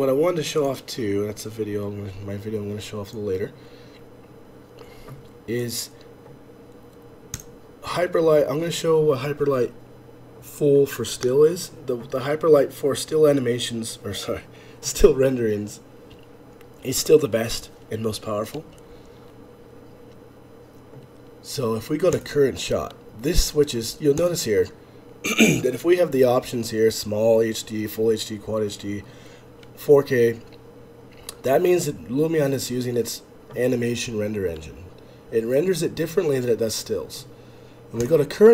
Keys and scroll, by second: 0.9 F11, 0.9 F8.